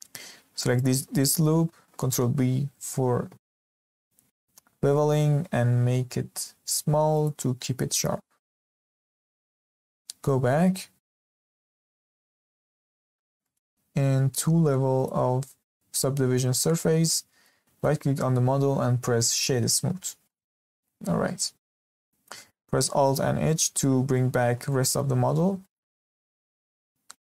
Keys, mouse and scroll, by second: 0.7 alt+click, 2.0 ctrl+b, 9.6 Tab, 12.0 click, 12.9-13.4 scroll down 2, 13.4-14.9 shift+middle drag, 14.9-16.0 drag, 16.0-17.7 middle drag, 17.7-20.3 right drag, 20.3-23.3 middle drag, 23.4 alt+h, 24.4-24.7 scroll up 2, 24.7-25.2 shift+middle drag, 25.2-25.6 scroll up 2, 25.6 shift+middle drag, 25.9 click, 26.1 scroll up 2, 26.4-26.7 shift+middle drag, 26.7 click.